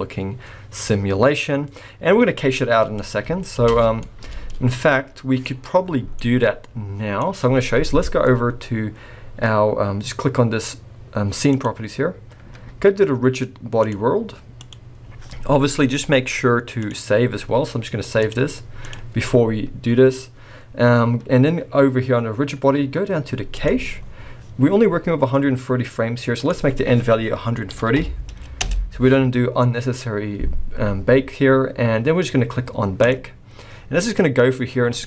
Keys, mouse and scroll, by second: 3.6 space, 3.7 scroll down 5, 4.0 middle click, 5.3 middle click, 5.4-6.1 scroll up 2, 6.1 middle click, 6.1-6.8 scroll up 1, 11.5 click, 14.6 click, 15.9 click, 23.5 click, 24.0-26.4 scroll down 3, 26.4 click, 33.0 click.